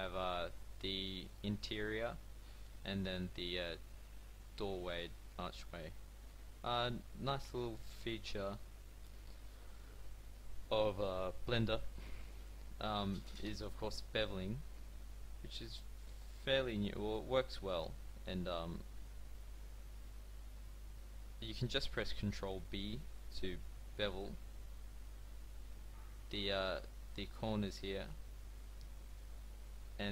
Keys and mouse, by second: 9.4-14.9 middle drag, 22.8 ctrl+b.